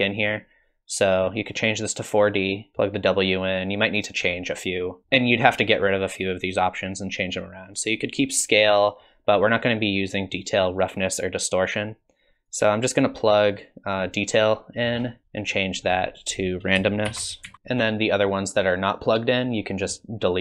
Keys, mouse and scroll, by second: 1.2 click, 2.4 click, 5.0 click, 7.4 click, 12.5 click, 14.9 scroll down 42, 15.2 click, 15.5 click, 17.5 s, 18.9 click.